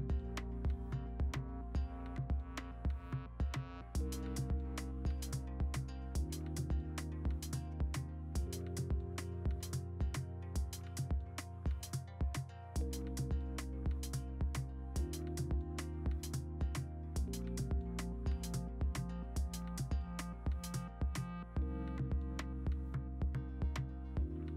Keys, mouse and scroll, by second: 0.3 v, 4.7 ctrl+t, 5.2 v, 6.7 v, 7.5 ctrl+u, 8.8 ctrl+a, 9.3 ctrl+alt+z, 9.6 ctrl+d, 9.8 ctrl+j, 11.8 ctrl+t, 12.3 Return, 13.0 v, 13.1 ctrl+alt+z, 13.1 ctrl+alt+z, 13.3 ctrl+t, 13.9 Return, 14.0 v, 14.8 Return, 15.3 ctrl+a, 16.1 ctrl+alt+d, 21.6 v, 22.8 v.